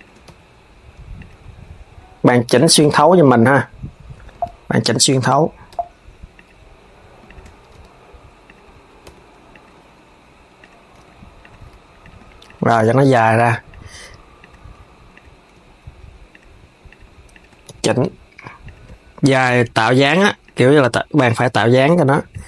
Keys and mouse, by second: 2.2-5.2 drag, 6.0 click, 6.9 shift+click, 7.4 r, 10.3 click, 11.7 click, 12.1 shift+click, 12.4 g, 14.1 click, 14.8 click, 15.2 g, 16.6 click, 17.0 shift+click, 17.3 g, 19.0 click, 20.8 click.